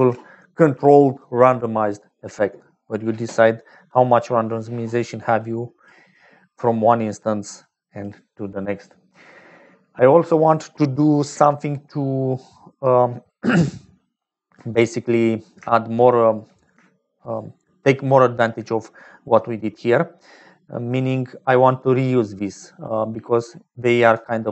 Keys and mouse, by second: 2.9 click, 5.4 click, 6.5 middle click, 7.6 click, 13.4 click, 15.6 shift+click, 16.7 shift+click, 21.5-23.0 d, 23.2 d, 24.1-24.5 d, 24.4 click.